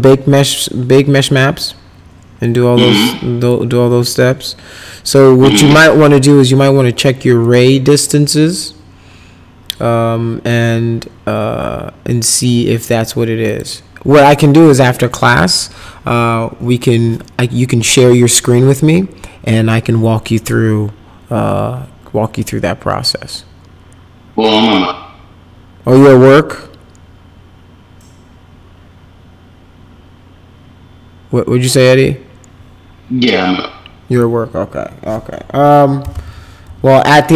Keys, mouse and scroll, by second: 2.4 click, 3.4 click, 7.4 click, 12.3 click, 13.5 click, 34.1 click, 35.8-37.3 typing.